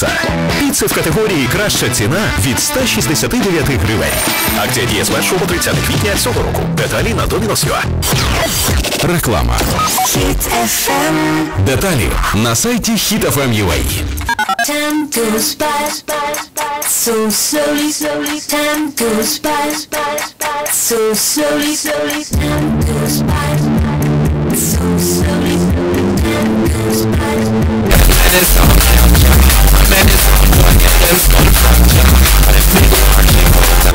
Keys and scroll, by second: 0.7 Return.